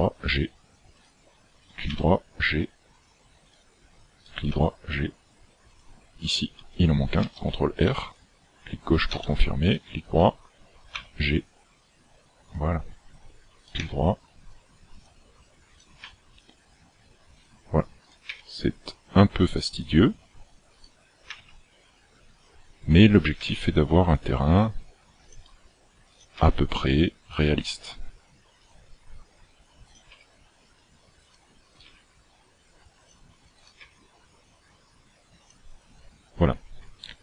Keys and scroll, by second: 2.0 g, 4.6 g, 7.2 ctrl+r, 11.0 g, 13.9 g, 16.0 g, 18.3 g, 21.4 g, 23.4 g, 26.5 g, 30.2 g, 31.8 g, 33.8 g.